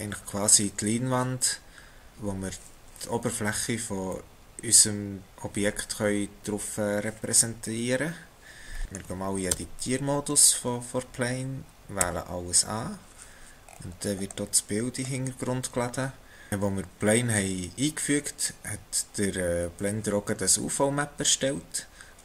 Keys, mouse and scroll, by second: 8.8 shift+middle click, 10.2 Tab, 10.6-12.0 scroll down 3, 12.0 a, 13.7-15.0 scroll down 9, 15.0-16.5 scroll up 1.